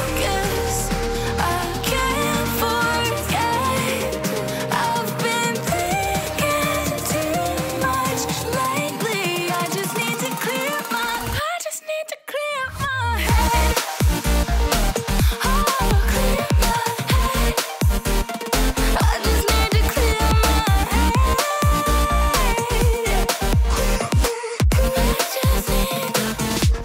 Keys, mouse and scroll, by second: 3.7 Return, 4.8-6.3 typing, 9.2 ctrl+0, 9.8 v, 10.0 ctrl+click, 12.0 ctrl+t, 14.0 alt+click, 15.5-16.6 alt+drag.